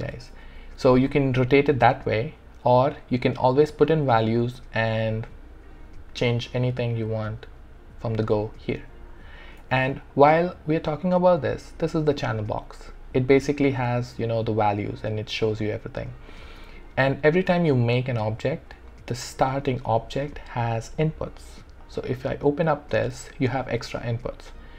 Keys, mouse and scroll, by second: 0.1 ctrl+z, 0.8 ctrl+z, 1.7 click, 9.6 w, 21.9 click.